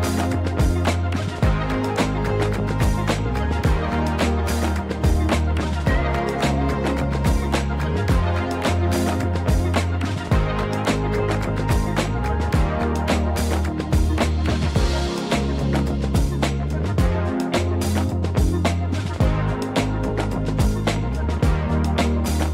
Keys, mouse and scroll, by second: 0.0 middle click, 0.0 click, 0.3 middle click, 1.0 e, 2.9 click, 3.5 Tab, 4.2-4.7 middle drag, 4.9 ctrl+2, 5.2-5.5 middle drag, 6.5 Tab, 7.2 ctrl+r, 8.0 right click, 8.5 ctrl+b, 10.3 click, 11.2 ctrl+r, 11.8 right click, 12.5 ctrl+b, 14.3 click, 14.8 middle click, 16.5 KP_1, 17.3 KP_3, 17.8 Tab, 18.5-18.8 scroll down 1, 19.3 right click, 19.8 click, 21.3 Tab, 21.9 a, 22.3 s.